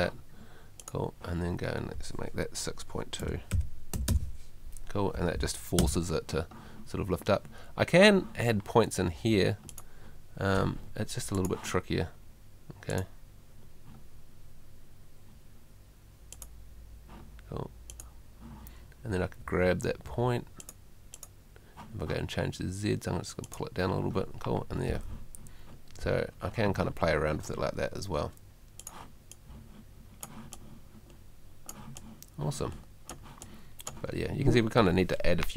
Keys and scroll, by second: 3.2 6, 5.8 F3, 9.1 Home, 19.4 Home.